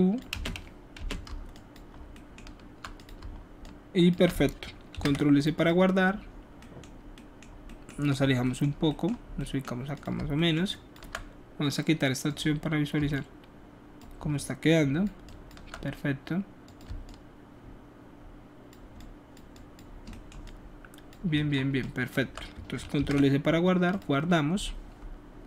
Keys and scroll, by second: 1.0 space, 4.9 s, 23.0 ctrl+alt+s.